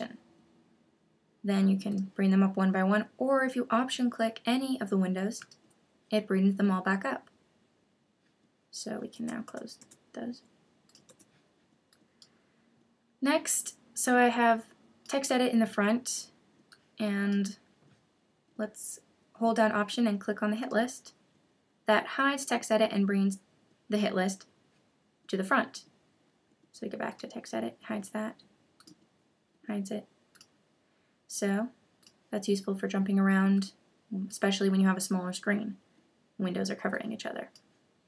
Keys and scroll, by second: 9.1 super+w.